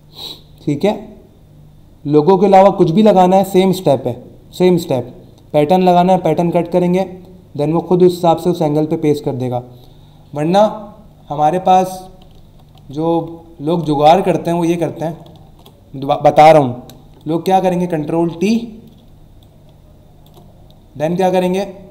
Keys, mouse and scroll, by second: 12.4 ctrl+z, 12.7 ctrl+z, 14.2 alt+scroll down 1, 15.0 alt+scroll up 1, 15.4 ctrl+d, 17.2 click, 19.4 alt+shift+click.